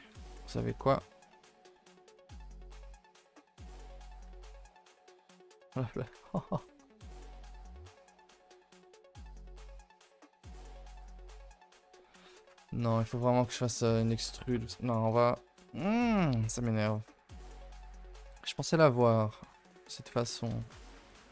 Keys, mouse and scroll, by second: 0.1 l, 0.5-0.8 scroll down 2, 0.8 ctrl+z, 1.0 ctrl+z, 1.3 ctrl+z, 1.5 ctrl+z, 2.2 ctrl+z, 2.6 middle click, 3.4 s, 4.6 s, 6.2 ctrl+z, 6.5-7.1 scroll down 2, 7.1 s, 8.4 middle click, 8.9 scroll down 1, 9.0 ctrl+z, 9.4 middle click, 9.7 g, 11.7 middle click, 12.3 ctrl+z, 12.4 ctrl+z, 12.8 ctrl+z, 13.5 middle click, 13.9 ctrl+z, 14.3 ctrl+z, 15.1 middle click, 15.4 x, 16.0 shift+middle click, 16.1-16.8 scroll up 2, 16.8 alt+click, 17.2 x, 17.8 middle click, 18.6 alt+h, 18.8 scroll down 2, 19.1 middle click, 19.5 Tab, 20.2 ctrl+s, 20.5-20.9 shift+middle drag, 20.9 click.